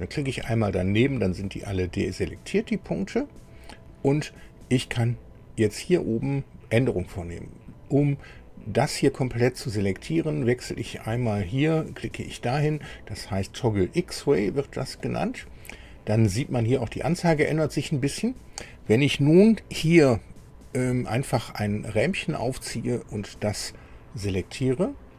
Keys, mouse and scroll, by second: 15.0 click, 21.6-23.4 drag.